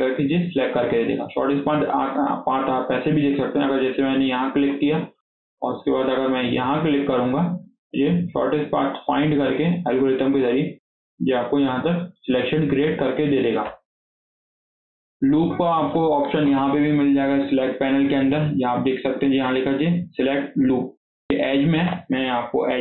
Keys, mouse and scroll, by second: 0.8-2.9 middle drag, 2.9 click, 3.2-4.3 scroll down 1, 4.3 scroll up 2, 4.5-7.3 shift+middle drag, 7.3 ctrl+click, 7.6 scroll down 1, 7.8 middle click, 8.4-10.0 scroll up 2, 10.2-13.5 shift+middle drag, 13.5 KP_7, 14.0 scroll down 2, 14.2 shift+middle click, 14.5 click, 14.9 scroll up 2, 15.1-17.4 shift+middle drag, 17.4-20.5 drag.